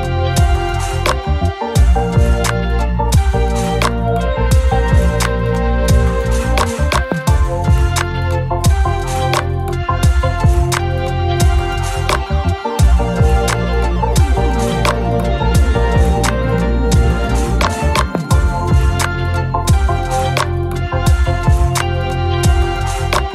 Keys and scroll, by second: 3.5 F1, 4.2 shift+F6, 17.1 F1, 17.4-18.3 typing.